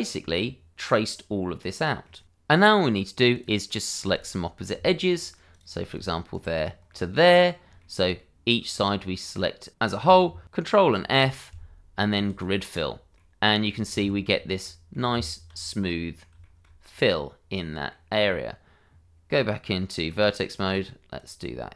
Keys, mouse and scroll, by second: 2.2 click, 3.3 click, 4.1 ctrl+click, 5.5 shift+click, 6.3 ctrl+click, 6.9 middle click, 7.8 shift+middle click, 8.1 middle click, 10.8 ctrl+f, 12.2 click, 13.1 middle click, 14.0 shift+z, 14.6 middle click, 15.1 Tab, 15.8 middle click, 16.4 shift+middle click, 17.6 middle click, 18.2 Tab, 20.6 click.